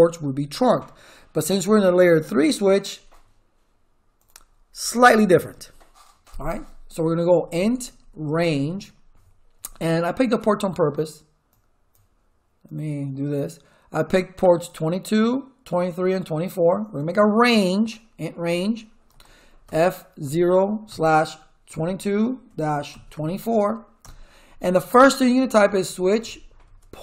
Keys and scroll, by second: 7.0-9.1 typing, 19.1-23.6 typing, 24.0 Return, 25.4-26.6 typing, 26.6 Tab.